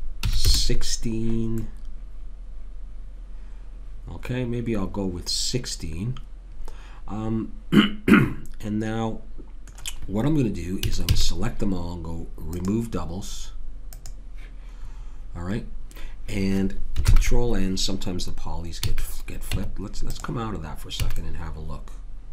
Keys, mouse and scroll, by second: 1.6-3.4 middle drag, 10.8 a, 11.0 a, 12.5-15.5 drag, 17.1 ctrl+n, 18.8 a, 19.5 Tab, 21.0 a, 21.2-22.3 middle drag.